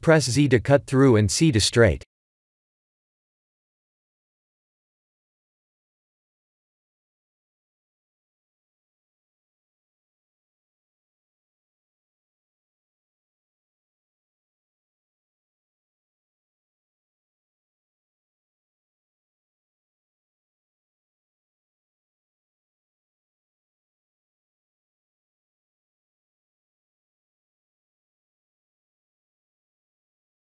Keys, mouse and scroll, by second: 5.0 middle click, 11.5 KP_1, 12.0 KP_3, 13.0 Tab, 13.7 Tab, 14.3 1, 15.6 3, 16.4 click, 16.9 b, 18.2 x, 19.5 middle click, 20.7 Tab, 21.5 middle click, 22.7 shift+z, 22.9 middle click, 24.7 right click, 25.3 middle click, 27.4 click, 27.8 click, 28.1 middle click, 29.6 click, 30.3 middle click.